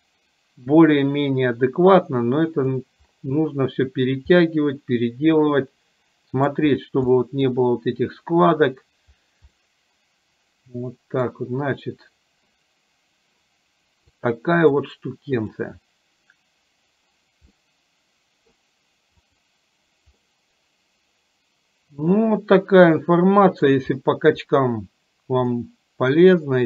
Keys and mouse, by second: 4.5-6.5 middle drag, 7.3 middle click, 9.7-11.4 middle drag, 14.2 click, 15.4 click, 17.7-18.7 middle drag, 19.4 click, 20.3-23.8 middle drag, 25.5-26.6 middle drag.